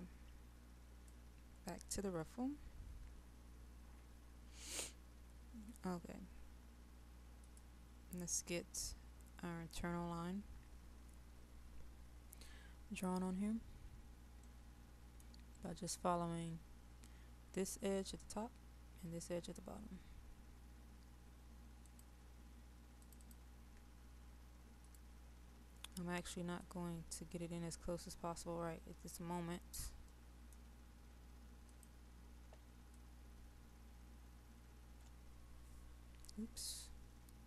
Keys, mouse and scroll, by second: 13.9-14.5 scroll down 1, 14.5 middle click, 21.8-28.4 drag, 29.6-30.1 scroll up 1, 30.1 middle click, 31.7 click, 33.0-37.4 shift+drag.